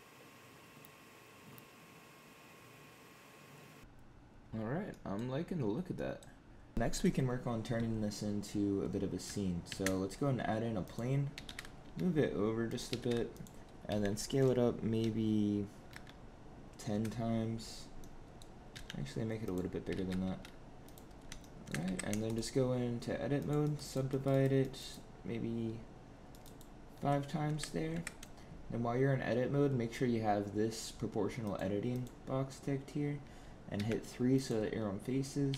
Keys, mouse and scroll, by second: 0.3 click, 0.4 click, 0.5 click, 0.6 middle click, 0.7 shift+middle click, 1.0 click, 1.4 middle click, 1.5 shift+middle click, 1.5 middle click, 1.7 scroll up 2, 1.8 middle click, 1.9 middle click, 2.0 middle click, 2.2 click, 2.3 scroll down 4, 2.3 middle click, 2.8 click, 2.8 click, 3.1 click, 3.5 scroll up 3, 3.6 click, 3.8 click, 4.8 middle click, 5.9 middle click, 9.6 shift+a, 11.2 g, 12.8 g, 13.8 s, 17.6 scroll down 2, 17.9 middle click, 18.2 middle click, 18.6 s, 19.8 g, 21.0 scroll down 1, 21.3 shift+middle click, 21.7 Tab, 22.2 right click, 23.5 right click, 24.0 right click, 24.5 right click, 26.2 right click, 27.4 Tab, 27.8 Tab, 31.3 click, 31.8 click, 33.6 3, 34.2 click, 35.4 g.